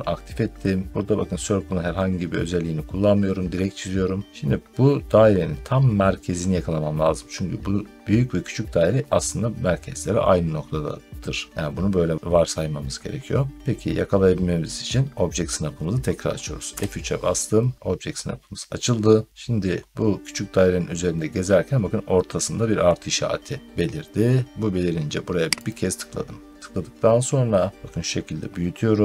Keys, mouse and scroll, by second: 16.6 F3, 25.6 click.